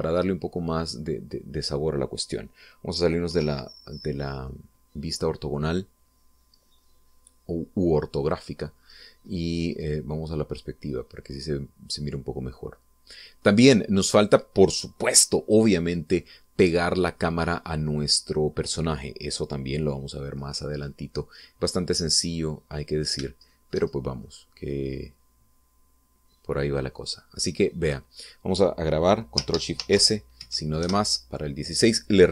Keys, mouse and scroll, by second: 3.2 scroll down 2, 4.4 5, 5.2 scroll down 2, 5.6-9.8 middle drag, 9.9-10.2 scroll up 2, 10.5-10.8 scroll down 2, 10.8 scroll up 2, 11.7-14.6 middle drag, 14.6 scroll up 2, 14.8-15.1 scroll down 2, 15.4-15.8 scroll down 2, 21.2 scroll down 1, 21.6-22.2 scroll up 4, 22.6 scroll down 2, 23.1-24.4 middle drag, 24.6 shift+middle click, 25.4-29.6 shift+middle drag, 30.9 ctrl+shift+s, 31.6 ctrl+shift++, 32.0 Return.